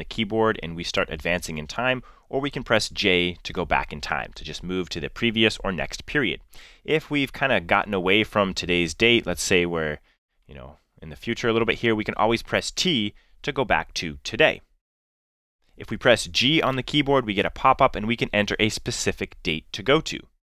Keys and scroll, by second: 3.2 j, 13.1 t, 16.6 g.